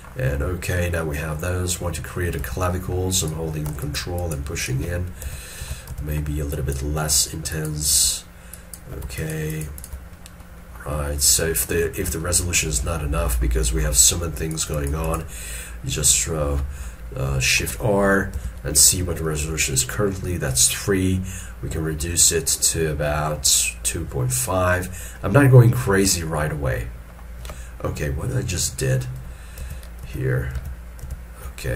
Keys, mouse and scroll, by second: 0.0 middle click, 0.5 scroll down 1, 1.1 middle click, 2.5 alt+e, 3.2 alt+click, 3.9 ctrl+click, 4.3 ctrl+double click, 4.7 ctrl+click, 5.4 ctrl+z, 5.7 ctrl+z, 6.6 ctrl+click, 7.2 ctrl+click, 8.6 ctrl+click, 9.3 shift+click, 9.6 shift+double click, 10.3 scroll down 1, 10.6 middle click, 12.3 shift+middle click, 17.1 middle click, 18.5 shift+r, 25.3 middle click, 29.3 middle click, 29.7 ctrl+z, 30.1 ctrl+z.